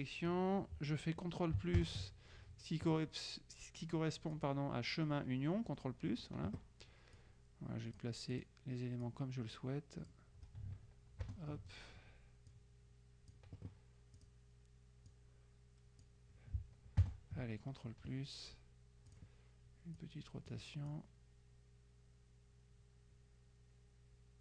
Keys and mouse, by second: 1.8 ctrl+KP_Add, 4.5 click, 6.3 click, 7.3-9.0 drag, 9.1-10.7 drag, 11.3 ctrl+KP_Add, 12.6 click, 14.3 click, 15.2 click, 17.1 ctrl+KP_Add, 19.2 click, 20.1-21.1 drag.